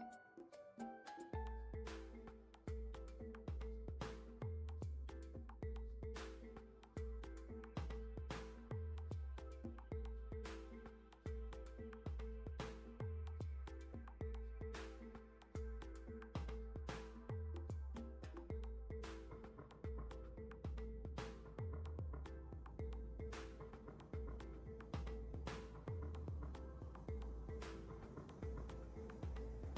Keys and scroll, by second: 1.8 KP_9, 1.9 KP_0, 2.2 Return, 4.5 z, 7.4 z.